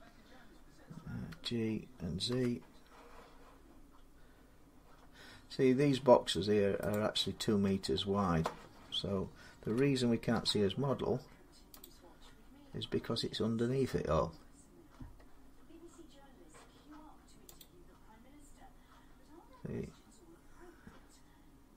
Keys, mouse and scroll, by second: 0.7 middle click, 1.1 g, 2.1 z, 6.7 click, 7.2-7.7 scroll, 9.4 g, 10.1 z, 10.7 scroll down 10, 10.7 g, 11.6 click, 12.0-12.7 scroll up 14, 13.1-14.7 scroll up 11, 14.7-16.6 scroll down 7, 17.4 click.